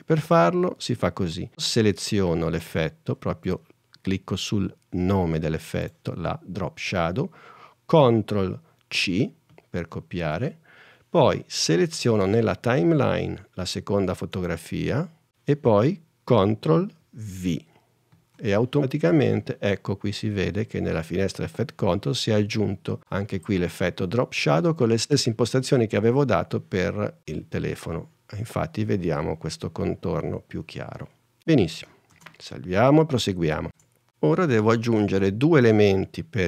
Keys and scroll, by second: 9.6 super+c, 18.2 super+v, 32.2 super+s, 33.8 super+Tab.